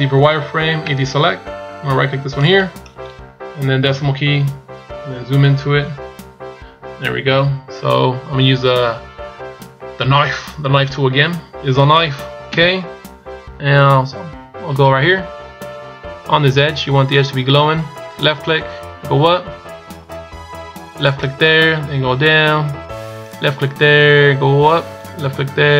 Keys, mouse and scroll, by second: 0.7 a, 2.2 right click, 3.5 KP_Decimal, 4.8-5.7 scroll up 10, 8.8 a.